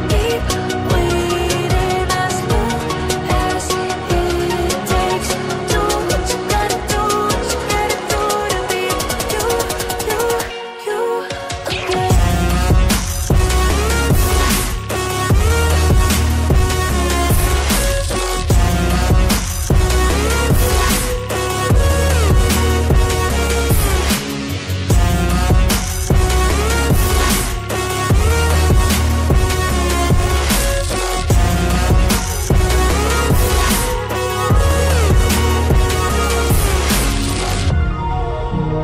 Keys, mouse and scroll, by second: 0.8 click, 11.6 click, 12.0-12.5 scroll down 1, 12.9 ctrl+v, 14.2 click, 17.6 click, 21.6 click, 23.3-28.2 typing, 29.5 click, 32.3 ctrl+z, 32.6 click, 35.0-37.2 drag, 35.0 right click, 35.2 ctrl+c, 35.3 ctrl+v, 36.9 ctrl+right click, 37.4 ctrl+a, 37.4-38.5 drag, 37.4 right click, 38.3-38.8 typing.